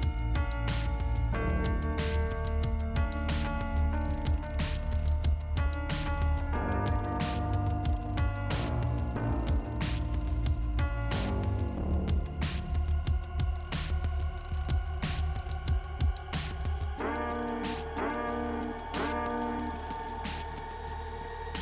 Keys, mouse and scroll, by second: 1.1 middle click, 1.7 middle click, 2.6-3.3 scroll up 1, 3.5 click, 7.1-8.3 scroll up 2, 8.5 click, 9.8 click, 12.5 click, 12.6 click, 13.9 click, 14.6 click, 17.2 click, 17.6 double click, 18.1 double click, 21.1 click.